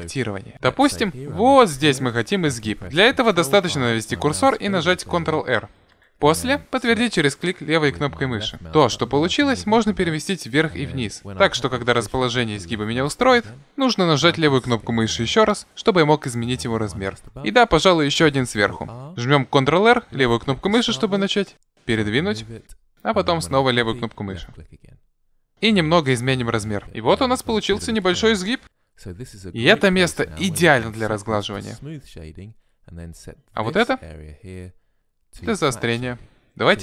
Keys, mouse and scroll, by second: 4.5 ctrl+r, 14.1 s, 17.1 ctrl+r, 24.7 s.